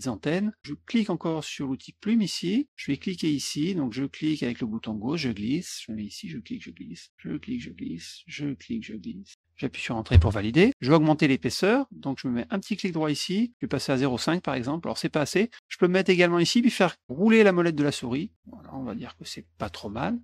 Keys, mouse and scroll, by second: 2.0 click, 3.2-5.1 drag, 6.0 click, 7.1 click, 8.6 click, 10.1 Return, 12.9 right click, 14.0 click, 17.3-17.8 scroll up 6, 18.5 scroll down 2.